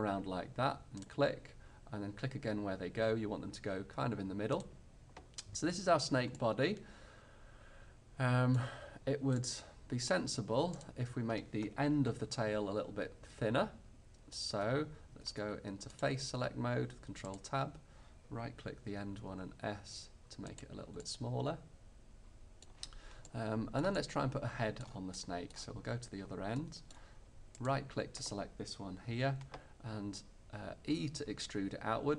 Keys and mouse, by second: 5.2-8.3 middle drag, 9.4 middle click, 10.9-12.7 middle drag, 15.4 ctrl+Tab, 17.4-18.5 drag, 19.3 s, 20.7-22.1 middle drag, 27.6-29.4 middle drag, 31.0 e.